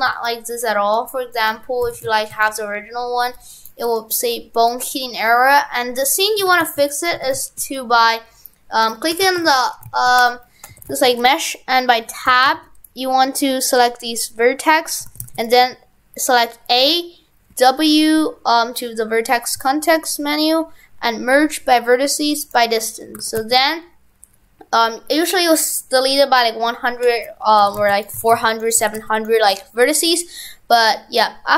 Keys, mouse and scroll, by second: 2.0 shift+f, 4.7 right click, 6.5 shift+f, 7.2 shift+f, 10.8 shift+f, 12.0 Tab, 12.3 shift+f, 13.8 click, 15.1 shift+f, 15.7 a, 17.5 w, 23.2 shift+f, 27.7 shift+f, 28.2 shift+f, 28.9 shift+f.